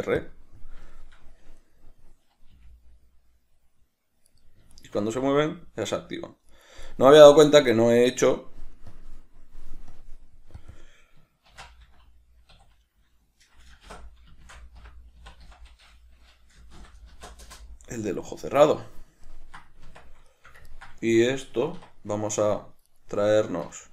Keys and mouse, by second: 1.2 shift+middle click, 1.9 right click, 2.8 g, 5.0 shift+right click, 5.4 g, 7.1 right click, 9.2 click, 10.2 drag, 10.8 click, 11.0-19.5 drag, 19.5 ctrl+middle click, 20.1 Tab, 22.4 right click, 23.1 right click.